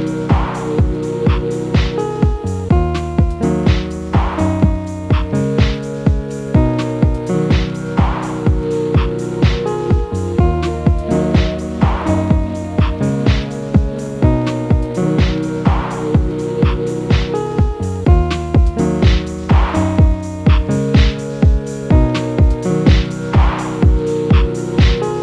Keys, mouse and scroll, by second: 0.0-0.8 middle drag, 0.8 click, 1.1 click, 1.5 scroll down 2, 1.7-3.0 middle drag, 3.0 a, 3.5 click, 4.9 click, 5.3 click, 5.7-7.9 middle drag, 7.9 a, 8.2-10.2 middle drag, 10.2 click, 11.9 click, 12.2 click, 13.1 click, 13.5 click, 13.7-15.0 middle drag, 15.0 scroll up 1, 15.2 a, 15.5 middle click, 16.0 click, 17.1 click, 17.5 click, 17.9 scroll down 2, 18.1-18.7 middle drag, 18.7-19.2 scroll up 2, 19.8 Tab, 20.2-20.5 scroll down 4, 20.5-22.5 middle drag, 22.5-22.8 scroll down 2, 22.8-23.3 scroll up 2, 23.3 click, 23.8 shift+a.